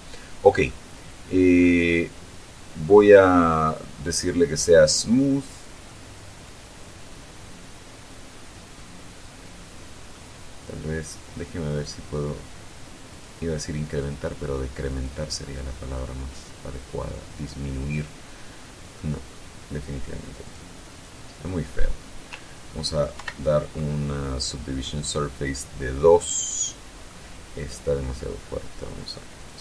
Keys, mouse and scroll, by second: 0.0 Tab, 0.7 scroll down 2, 1.0-2.1 drag, 5.1 click, 6.2-10.6 middle drag, 13.4 click, 14.3 click, 15.3 click, 16.3-19.5 middle drag, 20.7 click, 21.2 click, 23.5 ctrl+2, 24.7-27.6 middle drag.